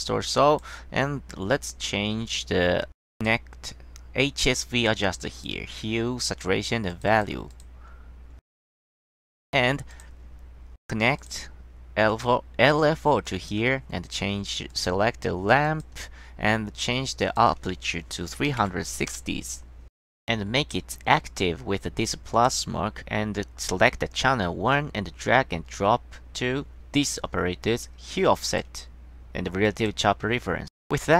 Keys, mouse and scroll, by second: 0.4 click, 1.4 click, 3.3 click, 4.6 click, 5.3 click, 5.9-6.2 scroll down 1, 6.3 click, 7.0 click, 7.6 click, 10.0 click, 11.3 click, 12.2 click, 13.4 click, 14.8 click, 15.8 click, 17.3 drag, 18.4 Up, 18.6 KP_1, 18.7 KP_0, 24.3-26.7 drag.